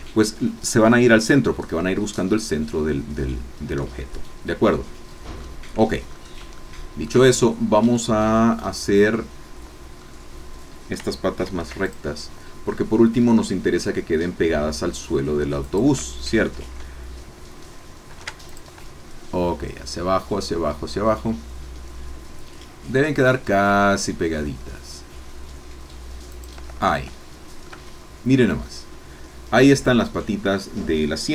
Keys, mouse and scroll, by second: 3.8-6.0 middle drag, 6.0-6.4 scroll up 3, 6.6 shift+middle click, 8.2-9.4 middle drag, 9.5-11.0 middle drag, 11.4 ctrl+r, 15.6 shift+click, 18.1 ctrl+r, 18.7 ctrl+click, 26.5 shift+click, 27.1 shift+middle click, 27.8 Tab, 28.3 scroll down 1, 28.7-30.5 middle drag, 30.5 click, 31.2-31.3 middle drag.